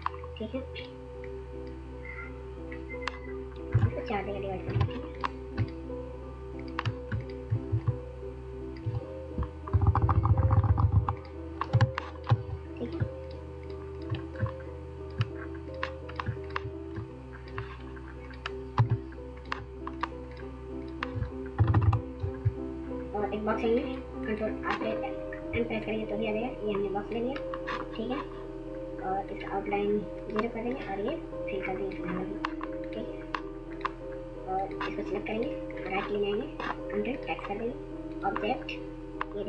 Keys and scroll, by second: 8.9 Up, 10.7 Up, 17.8 w, 20.6 Right, 20.8 Right.